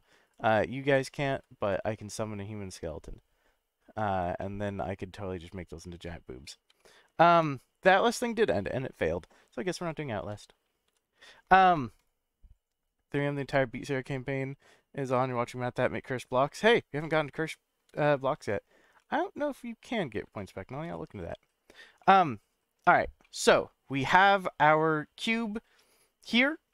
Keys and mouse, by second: 0.3 click, 1.0-1.4 middle drag, 1.6 click, 2.0-3.8 middle drag, 4.4-4.8 middle drag, 6.0-6.4 middle drag, 6.8-7.1 shift+middle drag, 9.8 ctrl+z, 12.0 click, 17.0-17.8 shift+middle drag, 18.4 click, 19.1-20.0 middle drag, 20.3-20.7 shift+middle drag, 22.0-22.7 middle drag, 23.2-26.7 middle drag.